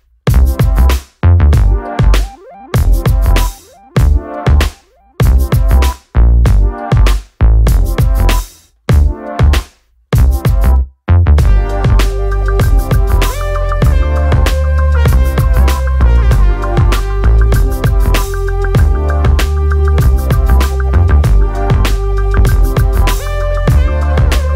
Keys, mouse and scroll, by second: 0.9 click, 1.8 click, 3.2 click, 4.9 click, 5.6 F4, 7.6 click, 8.7 alt+middle click, 11.1 click, 12.3 alt+middle click, 13.4 click, 14.3 click, 15.2 alt+middle click, 24.1 click.